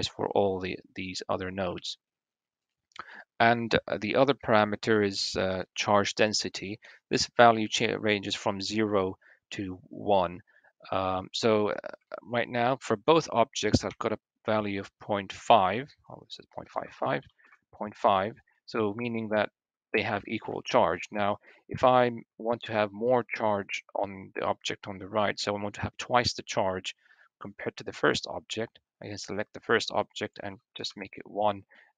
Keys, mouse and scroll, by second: 1.7-2.6 shift+middle drag, 1.7-3.0 scroll down 1, 2.3 click, 2.7 Tab, 4.8 click, 6.2-10.9 middle drag, 11.8 shift+middle click, 12.8 middle click, 13.0-16.6 drag, 13.6 l, 16.6 middle click, 18.2 click, 18.5 l, 19.5 l, 20.0 click, 30.0 click.